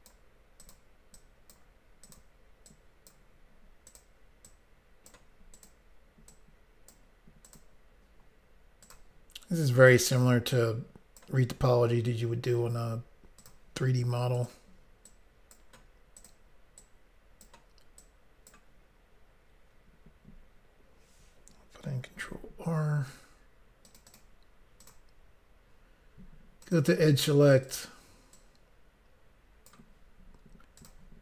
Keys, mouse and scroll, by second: 0.6 click, 0.7 click, 1.1 click, 2.0 click, 2.1 click, 2.7 click, 3.9 click, 4.0 click, 4.4 click, 5.5 click, 5.7 click, 6.3 click, 7.5 click, 7.6 click, 8.8 click, 8.9 click, 9.9 click, 10.0 click, 10.5 click, 13.4 click, 13.5 click, 14.3 click, 14.5 click, 15.1 click, 16.3 click, 18.0 click, 22.2 ctrl+r, 22.9-23.4 scroll up 1, 23.9 click, 24.0 click, 24.1 click, 24.3 double click, 24.8 double click, 24.9 double click, 26.6 click, 27.6 click, 28.3 click, 30.8 click, 30.9 click.